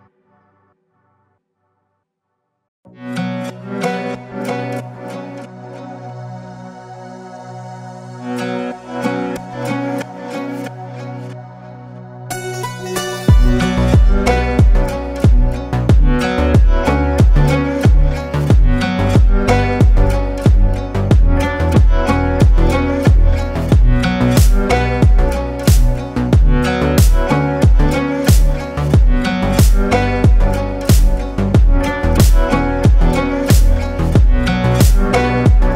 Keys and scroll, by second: 5.1 ctrl+space, 6.1 ctrl+space, 6.7 ctrl+space, 10.6 ctrl+g, 14.1 ctrl+space, 15.0 ctrl+space, 16.6 space, 17.9 ctrl+space, 24.0 ctrl+space, 28.3 ctrl+space, 29.2 ctrl+space, 30.0 ctrl+space, 32.5 Up.